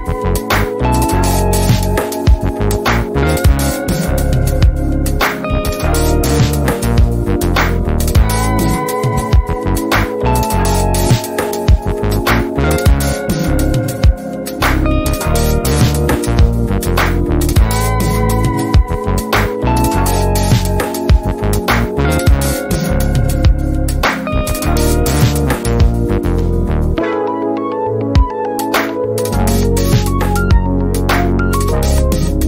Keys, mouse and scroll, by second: 2.9-3.8 click, 3.9 Delete, 5.6-7.1 ctrl+drag, 8.3-8.6 ctrl+click, 8.8-9.5 ctrl+scroll down 2, 9.5 F1, 9.9 ctrl+scroll up 1, 10.4 F2, 11.5-12.1 click, 12.3 ctrl+scroll up 1, 14.0-14.4 ctrl+scroll down 1, 14.4 F1, 14.8 shift+right click, 15.2 z, 15.7-16.3 click, 16.3 F1, 18.0 ctrl+z, 18.4 click, 18.5 F2, 19.0 ctrl+scroll up 1, 19.3 F1, 20.0-21.3 drag, 22.3-23.5 ctrl+drag, 24.2 F1, 25.4 b, 26.9 click, 27.2 F2, 28.1 r, 28.8 ctrl+scroll up 2, 29.2 F2, 30.2-30.9 typing, 30.6-31.2 click, 31.3 F1, 31.6 ctrl+scroll down 1, 32.1 F2.